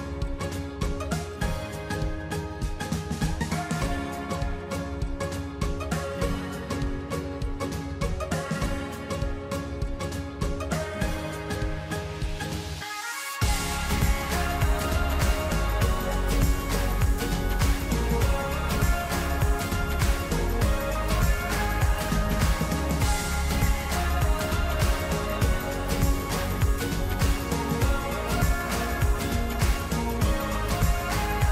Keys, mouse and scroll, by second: 1.3-4.3 drag, 6.0 ctrl+Num_Lock, 6.0 click, 7.0 j, 11.9 click, 17.3-27.6 drag, 29.6 click.